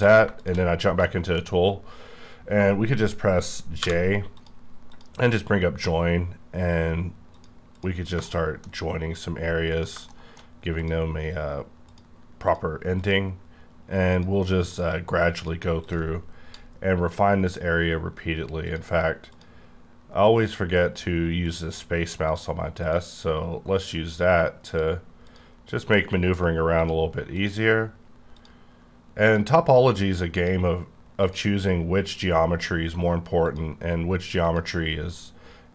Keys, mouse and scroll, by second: 0.4 shift+click, 1.0 shift+middle click, 1.6 scroll up 1, 1.9-2.5 scroll down 5, 3.8 j, 4.4 click, 4.9 click, 7.3 click, 7.3 click, 7.7 click, 8.2 shift+middle click, 8.8 scroll down 1, 9.1 click, 9.7 click, 10.1 shift+middle click, 10.8 click, 11.9 click, 12.5 click, 13.0 click, 14.1 click, 14.7 click, 15.4 click, 15.8 click, 18.6 click, 19.3 click, 20.4 click, 21.4 click, 22.3 click, 22.8 click, 24.7 click, 25.3 click, 26.8 click, 27.3 click, 28.3 click, 29.2 click, 30.3 click, 31.2 click, 33.4 click, 34.4 click.